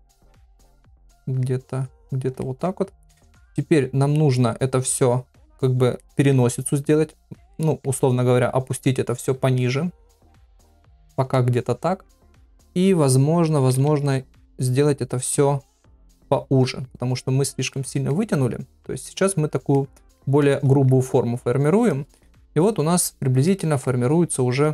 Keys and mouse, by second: 0.4 click, 0.7 middle click, 1.8 click, 2.4 middle click, 3.7 click, 6.0 middle click, 7.0 click, 7.5 middle click, 8.3 click, 9.1 click, 9.6 middle click, 10.4 middle click, 11.1 click, 11.3 middle click, 13.5 ], 13.7 ], 14.0 middle click, 15.4 click, 16.2 click, 17.0 click, 17.7 middle click, 18.3 middle click, 19.0 click, 19.7 middle click, 20.4 middle click, 21.4 click, 21.9 middle click, 22.8 click, 23.5 middle click, 24.3 click.